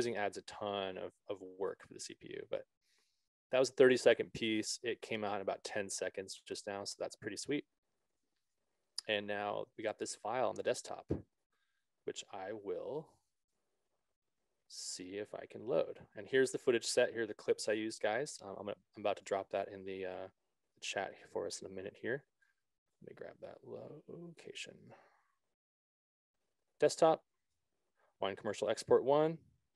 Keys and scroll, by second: 14.4 alt+Tab.